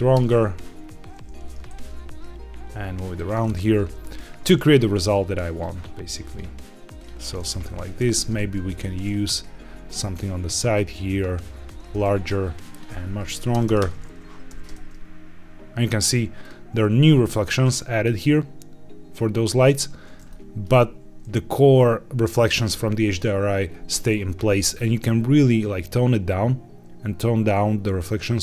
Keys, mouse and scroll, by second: 0.7-1.3 scroll down 1, 1.3 scroll down 2, 1.3 g, 1.6 shift+z, 3.0 click, 3.4 scroll up 2, 3.8 shift+middle click, 4.2 scroll up 1, 5.0 click, 6.2-7.0 drag, 7.9 shift+d, 8.3 shift+z, 9.8 click, 10.7 click, 12.6-13.7 drag, 13.6 KP_0, 14.4 g, 14.7 shift+z, 16.3 click, 17.6 scroll up 2, 19.5-20.1 scroll down 2, 20.2 shift+middle click, 23.6-24.1 scroll down 1, 24.7-28.4 shift+drag.